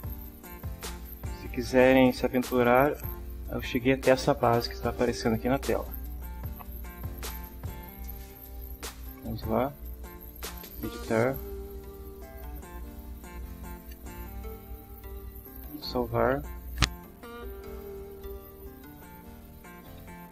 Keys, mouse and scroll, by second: 0.5 click, 9.2 click, 10.7 click, 12.4-13.4 drag, 14.9 click, 15.9 click, 19.5-20.3 typing.